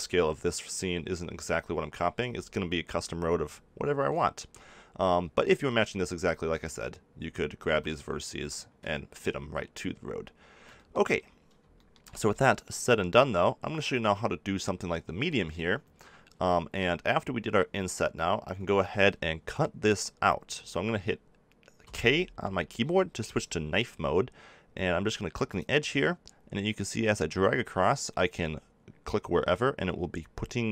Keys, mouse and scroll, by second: 0.6-3.8 middle drag, 3.9 middle click, 4.6 middle click, 6.3 middle click, 7.0 click, 7.1-10.4 middle drag, 7.6 a, 10.5-11.7 middle drag, 21.8 k.